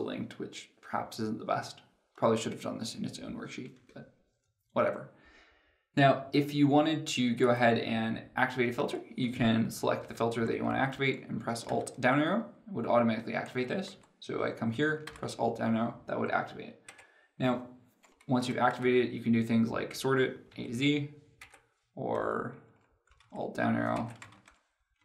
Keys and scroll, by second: 11.3 alt+Down, 11.9 alt+Down, 15.8 alt+Down, 18.5 alt+Down, 23.1 alt+Down, 24.1 alt+Down.